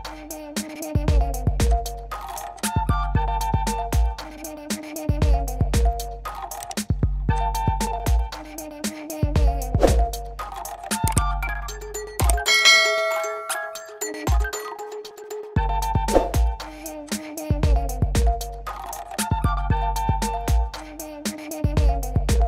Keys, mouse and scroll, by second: 0.0 middle click, 1.0 middle click, 1.0 right click, 1.7 click, 1.7-2.2 scroll, 2.2 right click, 2.6 click, 4.7 click, 7.4 click, 10.5 alt+j, 12.8 click, 14.4 click, 15.8 click, 21.3 click.